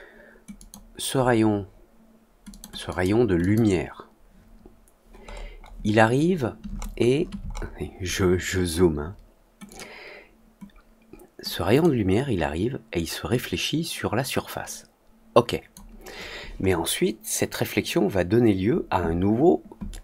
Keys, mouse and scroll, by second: 0.5 click, 2.4 click, 2.8 click, 3.3 click, 9.6 click, 11.7 click, 13.2-15.6 drag.